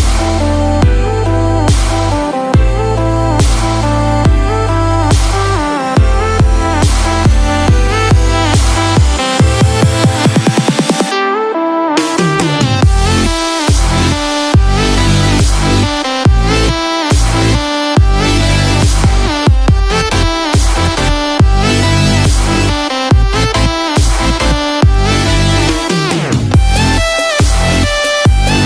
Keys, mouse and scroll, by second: 12.1 click, 19.8 click.